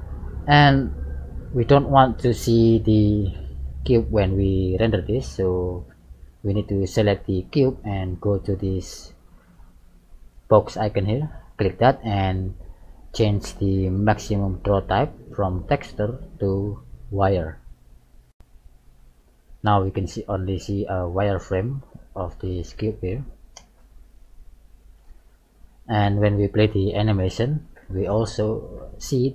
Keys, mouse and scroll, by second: 0.0 click, 0.7 middle click, 2.5 right click, 3.2 middle click, 7.2 right click, 8.8 middle click, 11.4 click, 15.9 click, 18.1 middle click, 20.6 middle click, 21.7 right click, 22.7 g, 24.6 middle click, 26.6 click.